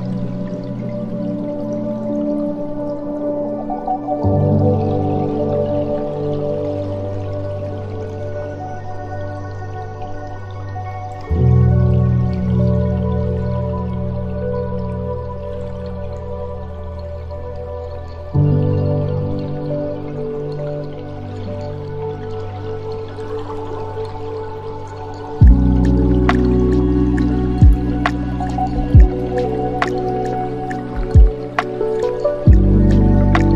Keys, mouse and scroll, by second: 5.8-7.8 middle drag, 7.8 space, 9.9 space, 10.6-12.0 middle drag, 12.0-12.3 scroll down 4, 12.3-15.3 middle drag, 15.3 click, 16.2 s, 22.9 middle click, 23.8 s, 31.3-32.6 middle drag, 32.6-33.5 drag.